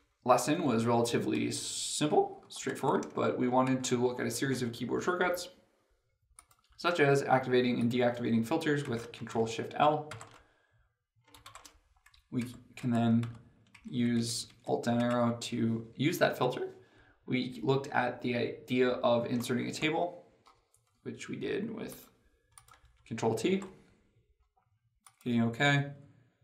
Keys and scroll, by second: 1.1 ctrl+Page_Up, 3.3 ctrl+Page_Up, 9.9 ctrl+shift+l, 12.0 ctrl+shift+l, 13.1 ctrl+Down, 14.9 alt+Down, 23.4 ctrl+t.